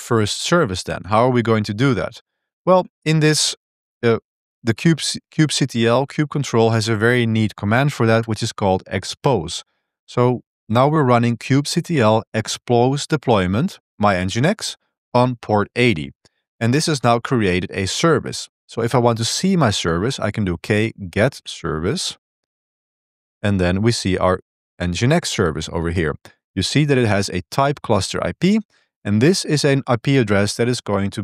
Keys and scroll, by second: 0.1-6.0 typing, 5.7 ctrl+b, 8.1 ctrl+shift+v, 15.4 Return, 20.2-23.1 typing, 23.2 Tab, 23.6 Tab, 23.7 Tab, 24.1 Return, 24.5 Return.